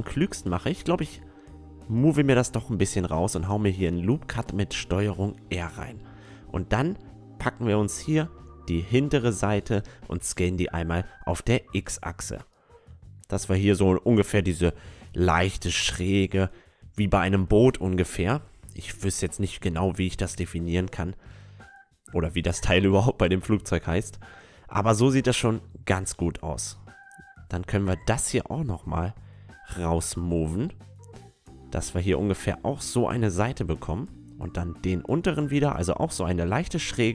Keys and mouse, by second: 0.2-1.3 middle drag, 1.3-3.0 drag, 3.3-5.9 middle drag, 3.9 ctrl+r, 6.4-8.4 middle drag, 8.4-10.8 right drag, 9.4 s, 11.8-13.7 middle drag, 14.6 middle click, 15.3 s, 17.3 right click, 18.3 a, 19.4 middle click, 19.4-20.6 right drag, 19.4 s, 22.9 Tab, 23.0-25.1 middle drag, 25.6-27.4 middle drag, 25.8 Tab, 27.4 click, 27.4 right click, 29.3-31.4 middle drag, 29.8-31.6 right drag, 30.4-32.1 drag, 34.3-36.2 right drag, 34.9-36.7 drag, 36.9 Tab, 37.0-37.1 middle drag.